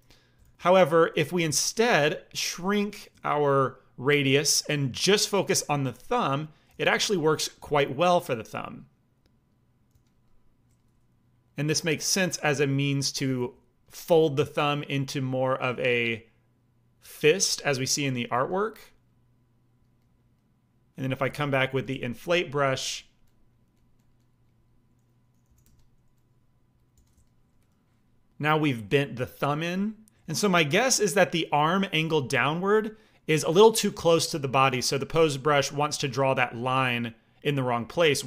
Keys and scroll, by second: 0.4 ctrl+z, 1.1 f, 1.9 f, 3.4 f, 4.7 f, 6.6 f, 9.8 f, 13.3 f, 17.3 f, 18.3 f, 21.2 i, 21.6 f, 22.1 f, 22.8 f, 25.4 g, 25.6 f, 26.9 f.